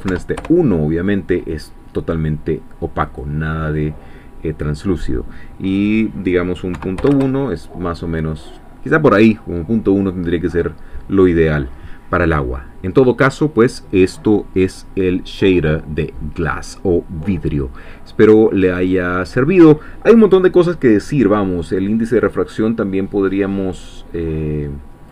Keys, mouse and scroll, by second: 0.1 1, 0.4 Return, 3.1-6.7 drag, 6.7 ., 7.0 1, 7.1 Return, 24.5 click.